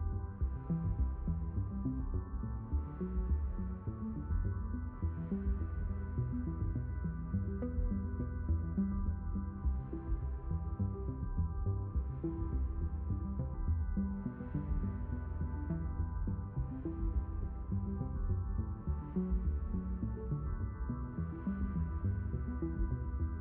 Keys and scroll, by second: 22.9 ctrl+shift+i.